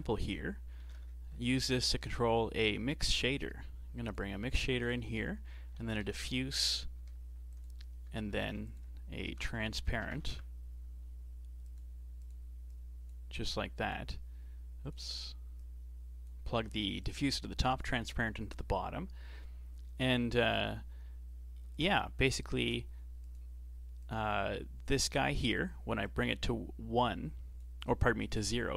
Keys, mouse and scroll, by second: 4.7 shift+a, 6.2 f, 8.4 shift+a, 12.7 click, 13.5 click, 15.6 click, 17.0 click, 21.7 shift+click, 22.3 ctrl+shift+click, 23.2 click, 26.0-28.7 drag.